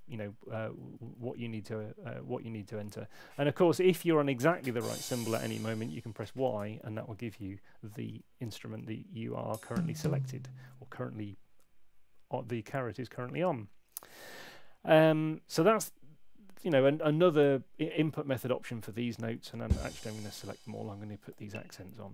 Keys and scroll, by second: 0.1 super+z, 0.4 super+z, 0.6 super+z, 0.8 super+z, 1.1 super+z, 4.2 Up, 5.2 Down, 6.4 y, 8.0 super+z, 9.4 Down, 18.3 ⟲, 20.3 [.